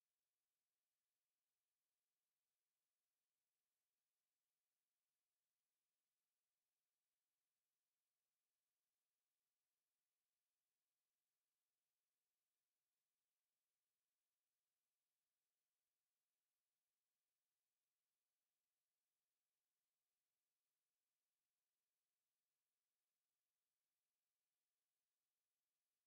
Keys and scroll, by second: 11.5 ctrl+a.